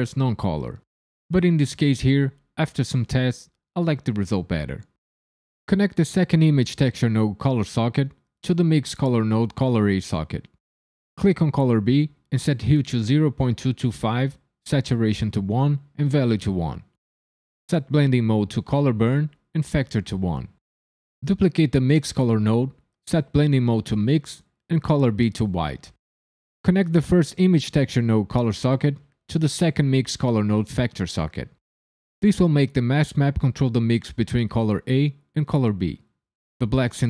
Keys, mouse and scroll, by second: 1.3 click, 3.0 click, 7.6 click, 11.2 click, 13.5 KP_2, 18.1 click, 19.9 click, 21.0 click, 21.6 shift+d, 22.5 click, 23.4 click, 24.6 click, 28.5 click.